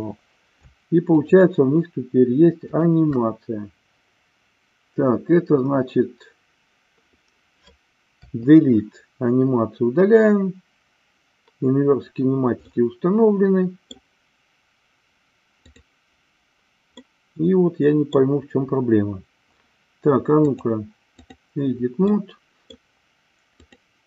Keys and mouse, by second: 1.1 shift+click, 2.8 shift+click, 8.1 Delete, 12.6-14.0 middle drag, 15.5 click, 17.0-18.3 middle drag, 20.4 click, 22.2 middle click, 23.5 click.